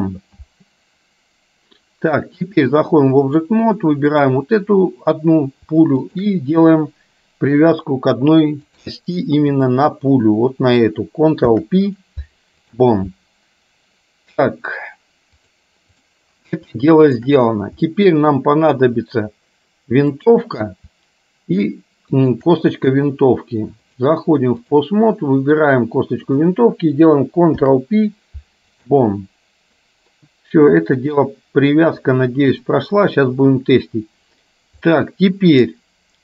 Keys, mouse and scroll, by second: 2.8 click, 4.2 click, 7.8-9.1 drag, 9.7 click, 11.4 ctrl+p, 15.7 click, 16.8 shift+middle click, 17.9 middle click, 20.3 click, 22.3 shift+click, 23.9-24.9 drag, 25.7 click, 27.6 ctrl+p, 32.1 click, 34.9 middle click.